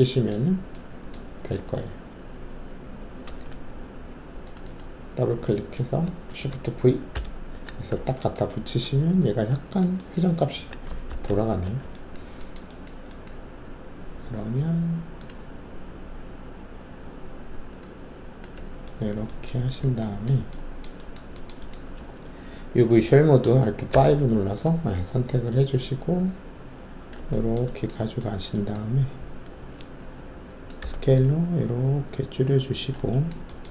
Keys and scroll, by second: 1.5 alt+2, 3.2 alt+2, 7.1 alt+shift+v, 11.0 ctrl+alt+z, 23.3 alt+5, 23.9 alt+5, 30.8 r.